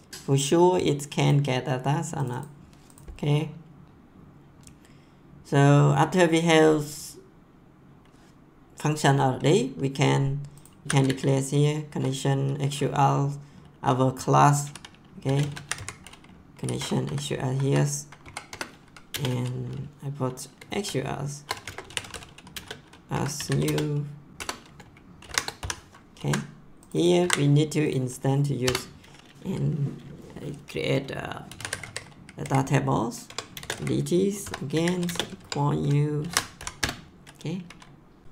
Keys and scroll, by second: 10.6-11.5 typing, 15.0-16.2 typing, 17.0 Down, 18.5 Return, 19.1 space, 20.7-24.0 typing, 24.3 Return, 25.2 shift+9, 25.6 ;, 26.1 ctrl+s, 27.2 ctrl+c, 28.6 Return, 31.2-36.5 typing, 33.2 Tab, 36.7 Return.